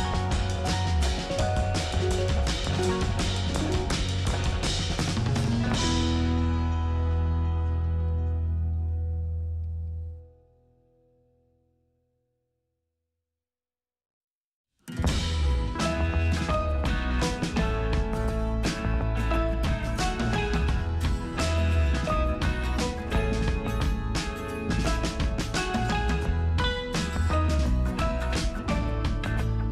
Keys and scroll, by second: 6.1 space, 13.0 space, 14.1 space.